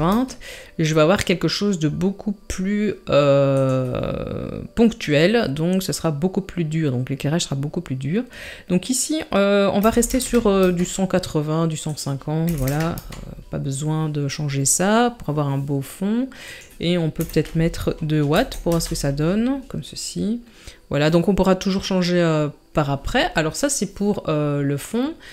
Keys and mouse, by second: 3.6-10.6 drag, 11.9-13.0 drag, 16.4-18.7 drag.